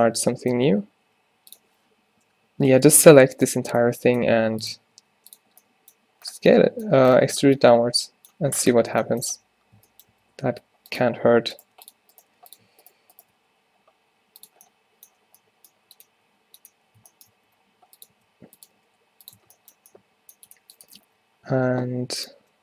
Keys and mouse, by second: 1.2 g, 3.4 middle click, 4.3 e, 4.7 middle click, 5.4 s, 5.9 click, 9.4 q, 9.9 q, 10.2 q, 10.6 s, 11.7 g, 12.3 g, 13.4 alt+s, 17.5 r, 18.2 s, 18.9 right click, 18.9 g, 19.5 Tab, 21.1-22.6 typing, 21.6 Tab.